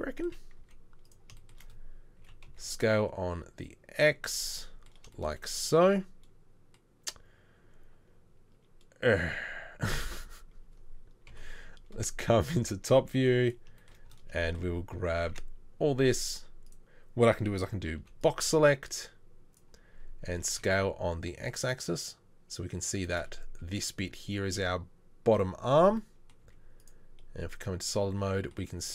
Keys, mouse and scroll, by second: 0.6 z, 2.2 s, 11.2 KP_7, 12.9 z, 15.3 1, 18.0 b, 20.3 s, 26.4 z.